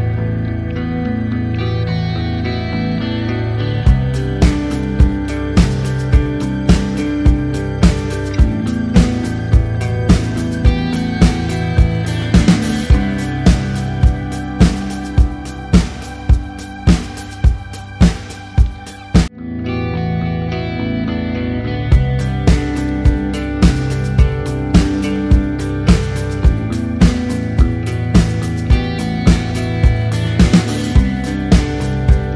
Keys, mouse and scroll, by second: 0.4 shift+Left, 4.4 click, 4.4 t, 5.5-6.3 typing, 7.0 click, 8.1 click, 8.2 KP_1, 8.6 KP_0, 8.7 Tab, 8.9 KP_5, 9.1 KP_Enter, 10.8 click, 12.9 KP_Enter, 14.6 click, 15.5-18.4 typing, 19.9 click, 20.8 KP_2, 21.2 KP_Enter, 22.0 click, 22.4-24.2 typing, 24.2 click, 26.2 BackSpace, 28.3 click.